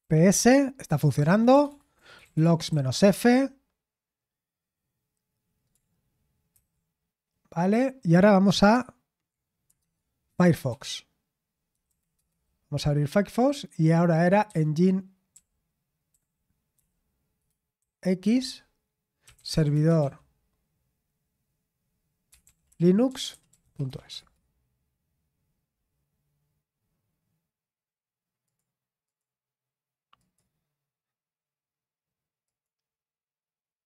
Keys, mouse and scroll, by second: 0.0-3.1 typing, 1.1 ctrl+p, 9.8 alt+space, 10.0-11.1 typing, 11.8 Down, 12.1 Return, 14.2-16.7 typing, 17.7-20.5 typing, 22.0-24.8 typing, 28.4 click, 28.8 click, 29.0 click, 30.1 click, 32.4 click.